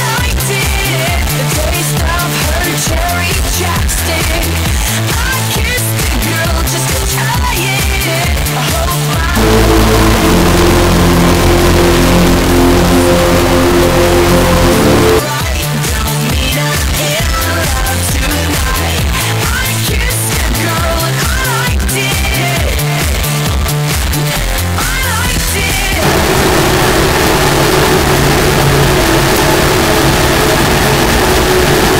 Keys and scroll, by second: 1.9 d, 2.2 Up, 2.6 Up, 3.1 Up, 15.2 Page_Down.